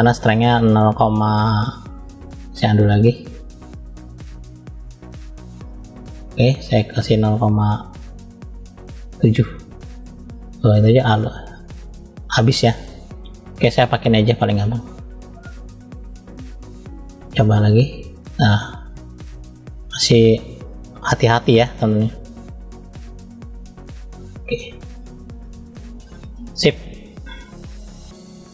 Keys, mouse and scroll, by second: 2.6-3.4 drag, 4.3-4.9 drag, 6.8-8.9 drag, 11.2-11.9 drag, 14.1 click, 14.9 click, 16.3 click, 17.2 click, 19.4-20.2 drag, 21.8 click, 22.9 click, 24.8 click, 26.0 middle click, 27.7 shift+middle click.